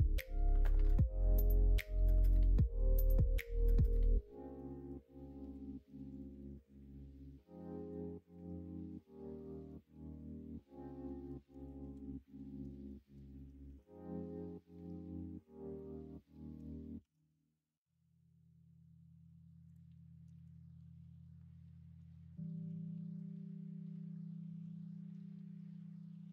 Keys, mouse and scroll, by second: 1.9 middle click, 2.6 middle click, 2.9 alt+z, 3.4 middle click, 4.5-5.5 middle drag, 6.4-7.9 middle drag, 8.3-9.6 middle drag, 10.6 middle click, 11.5 KP_1, 11.9 KP_3, 12.8 shift+middle click, 13.6 shift+a, 17.0 shift+s, 20.3 shift+a.